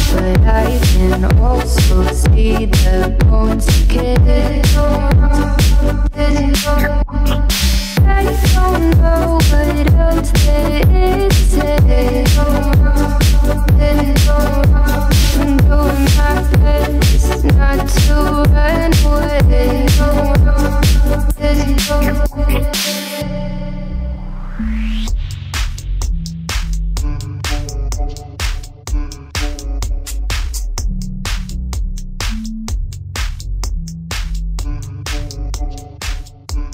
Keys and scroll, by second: 0.4 Right, 3.3 Left, 3.9 Right.